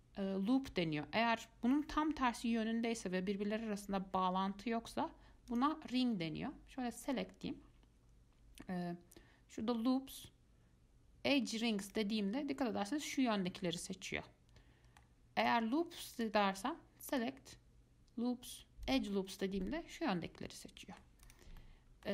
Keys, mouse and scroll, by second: 5.7 click, 7.2-10.2 drag, 14.0-15.6 middle drag, 15.6 click, 16.4 click, 17.3-19.8 drag, 19.8-21.4 middle drag, 21.4 click, 21.8-22.1 middle drag.